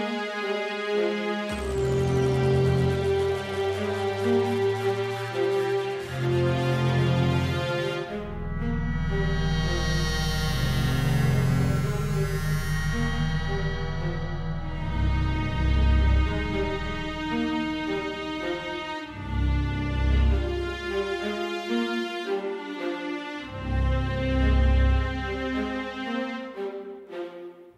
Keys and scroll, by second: 21.4 super+d.